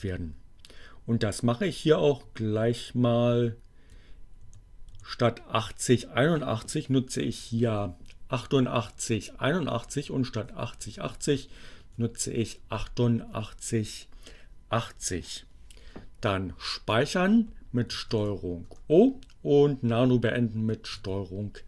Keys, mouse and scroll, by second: 2.2 Right, 4.6 Left, 7.2 Delete, 7.6 8, 9.7 Down, 10.0 Right, 12.5 8, 17.6 ctrl+o, 18.6 Return, 20.4 ctrl+x.